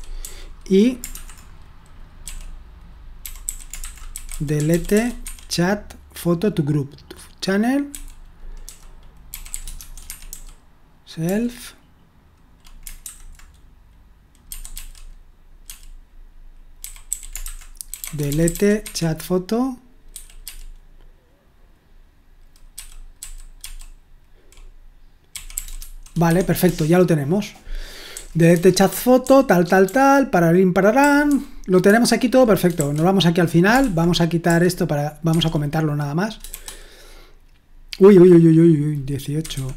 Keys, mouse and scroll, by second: 0.0-5.4 typing, 7.9-11.7 typing, 13.0 typing, 14.4-19.0 typing, 20.1-20.4 typing, 22.7-23.6 typing, 25.1-29.2 typing, 30.8-34.4 typing, 35.2 Escape, 36.5-39.7 typing.